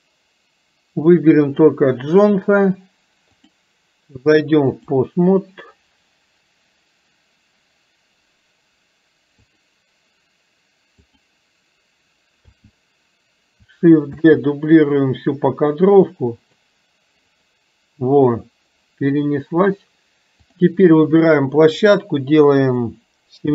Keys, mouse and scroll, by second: 1.5 click, 3.5-5.2 drag, 9.5 click, 11.0 click, 17.4 click.